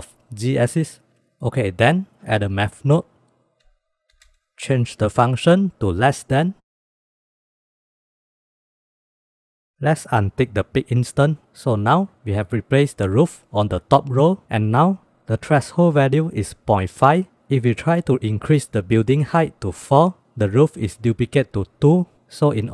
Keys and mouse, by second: 1.8 shift+a, 4.5-6.3 drag, 6.9-7.3 middle drag, 7.8 click, 8.3 click, 9.0 drag, 9.5 click, 11.0-11.4 drag, 14.5-14.8 drag.